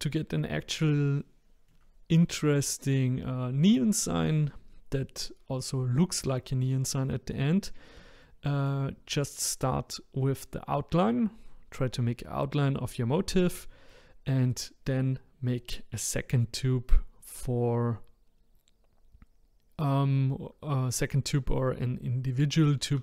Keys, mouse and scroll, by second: 0.5-1.2 scroll down 1, 1.2-4.2 shift+middle drag, 8.2 shift+middle click, 9.0-12.0 scroll down 1.